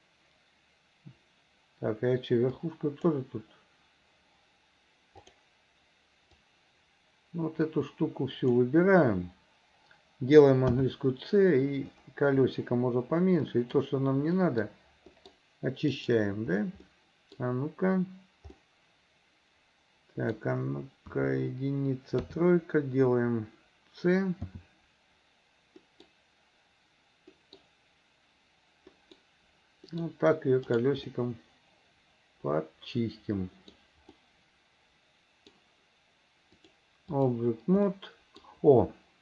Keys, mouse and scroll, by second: 2.6 click, 5.3 click, 6.4-8.6 drag, 10.7 c, 16.9 middle click, 18.6-20.5 middle drag, 21.1 KP_1, 22.2 KP_3, 24.4 c, 31.2-33.8 middle drag, 34.2-35.6 middle drag, 36.6 click, 37.9 middle click.